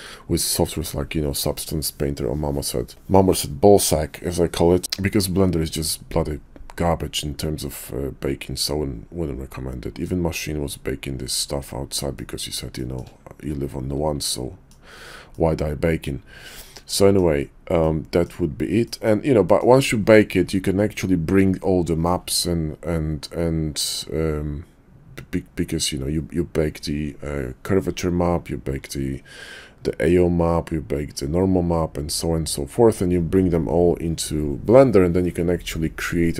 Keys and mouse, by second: 8.4-10.1 middle drag, 11.6 shift+middle drag, 12.1-12.5 middle drag, 12.8 shift+middle click, 14.4 middle click, 15.3-17.1 middle drag, 17.8-18.2 middle drag, 18.8 middle click, 19.5 shift+middle click.